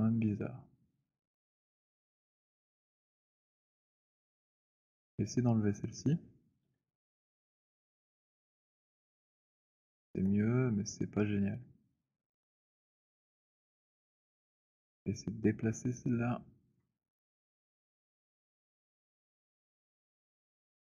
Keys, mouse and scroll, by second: 4.0 alt+click, 5.2 click, 6.7 Delete, 9.7 alt+click, 10.0 z, 10.9 middle click, 12.8 alt+middle click, 14.7 alt+click, 16.8 right click, 18.0 click, 20.0 click.